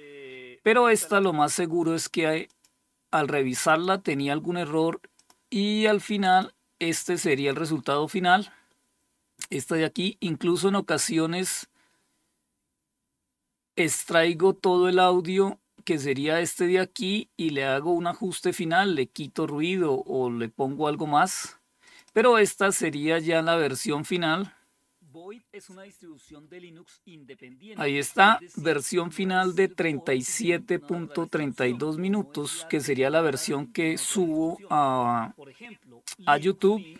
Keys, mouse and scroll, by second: 0.6 click, 1.9 click, 3.1 click, 4.6 click, 5.6 click, 6.8 click, 7.1 click, 21.3 click.